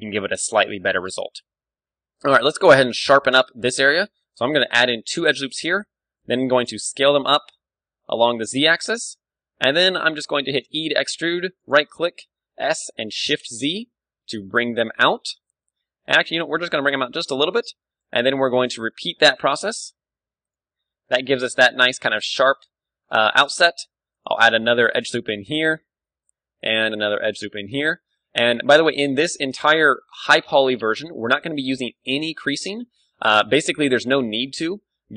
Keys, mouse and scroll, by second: 0.7 a, 4.7 ctrl+r, 5.5-7.3 drag, 5.8 s, 8.6 click, 9.4-10.7 drag, 10.7 e, 12.4-13.9 right drag, 12.4 s, 17.4-19.2 drag, 17.7 e, 18.1-19.6 middle drag, 18.2 s, 19.6 right click, 20.5-21.6 drag, 20.6 Tab, 21.9 Tab, 22.1 middle click, 22.6 a, 23.8 ctrl+r, 25.5 click, 25.7-27.1 middle drag, 26.8 ctrl+r, 27.1 click, 27.4 middle click, 30.1-31.9 drag, 30.4 Tab, 31.2 KP_1, 31.9-34.6 middle drag, 32.2 Tab, 32.9 a, 33.2 z, 34.1 ctrl+r, 34.1 z.